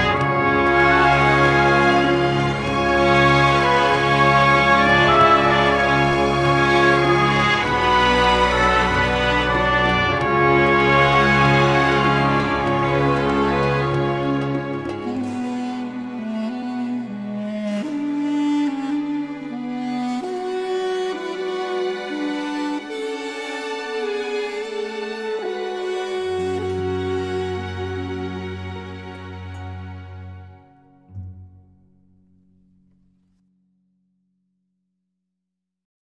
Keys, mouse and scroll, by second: 0.0 space, 0.9-1.7 scroll down 2, 1.7 space, 1.9 click, 2.2 space, 7.0 click, 7.8-17.8 drag, 24.6-34.6 drag.